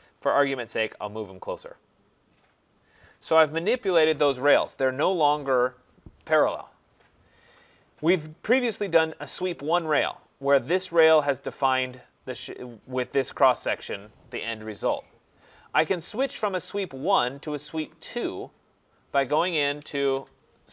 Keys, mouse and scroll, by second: 0.3 click, 1.7 click, 2.5 scroll, 3.1 Escape, 3.2 Escape, 3.6-4.1 scroll, 5.4 right click, 8.2 scroll, 9.7 middle click, 9.7 click, 11.9 click, 17.2 click, 19.8 Escape, 19.9 Escape, 20.1 Escape, 20.5 click.